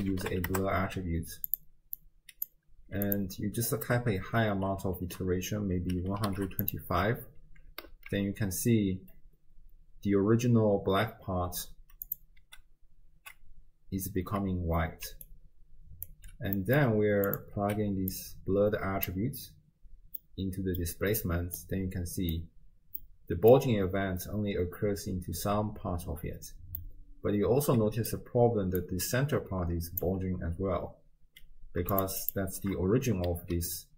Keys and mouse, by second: 2.0-2.6 drag, 3.1-6.7 drag, 7.9 alt+z, 12.1 click, 12.5 m, 13.2 m, 15.1 d, 15.2 right click, 16.2 d, 16.6 middle click, 16.6 d, 17.3 drag, 17.6 x, 18.2-19.3 drag, 20.2 middle click, 21.6-22.4 middle drag, 23.1 middle click, 26.8-28.2 drag, 28.5 d, 28.8-30.0 drag, 30.2 d, 32.0 ctrl+shift+drag, 32.3 ctrl+shift+click, 33.4 alt+z.